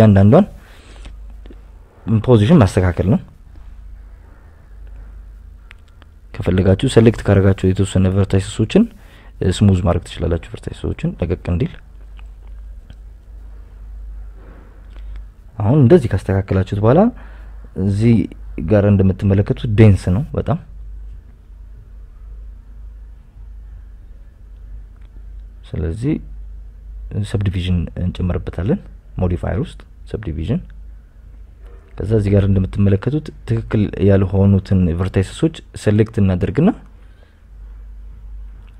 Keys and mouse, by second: 0.5 right click, 0.6 g, 2.0 click, 2.3 g, 2.5 g, 3.3 right click, 3.5 g, 4.4 g, 4.8 click, 5.1 click, 5.8 shift+click, 6.8 click, 8.4 right click, 8.7 g, 10.3 g, 12.0 click, 12.6 g, 13.5 click, 13.9 right click, 14.3 g, 15.4 g, 15.5 g, 16.4 g, 16.9 g, 17.3 right click, 17.7 right click, 18.2 a, 18.7 right click, 20.7 click, 21.6 a, 23.1 click, 25.4 s, 25.6 y, 26.3 Escape, 26.5 ctrl+z, 26.6 ctrl+z, 27.6 right click, 28.3 Tab, 29.0-30.1 drag, 31.9 click, 32.8 Tab, 35.1 right click, 35.4 g, 36.7 click, 37.2 right click, 37.6 g, 38.1 click.